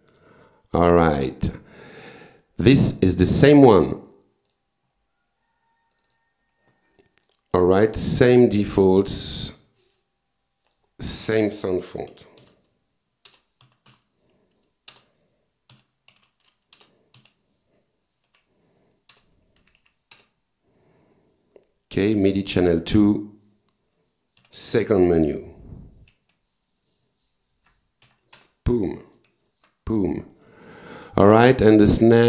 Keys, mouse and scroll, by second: 0.1 click, 1.5 click, 3.5 click, 4.0 right click, 4.5 click, 6.0 click, 7.3-7.8 drag, 8.2-8.6 drag, 8.6 click, 9.0 click, 9.6 click, 10.7 click, 11.1 click, 12.1 u, 12.4 s, 13.3 Return, 13.6 s, 13.9 h, 14.9 Return, 15.5-17.2 typing, 16.8 Return, 18.3 f, 19.1 Return, 19.6 Down, 20.2 Return, 22.3 click, 24.4 Page_Down, 25.7 Up, 28.4 Return, 29.4 alt+F4, 31.3 click.